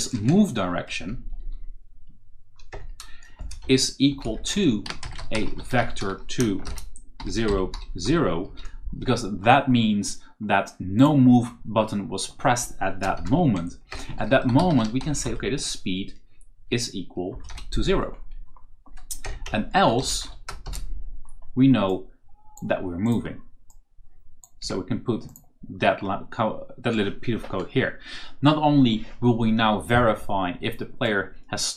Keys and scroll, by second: 1.0 Down, 2.6 Return, 3.3-8.4 typing, 13.8 shift+Return, 14.2-15.4 typing, 17.2 space, 17.4 0, 19.1 Return, 19.3-20.5 typing, 24.5 shift+Tab.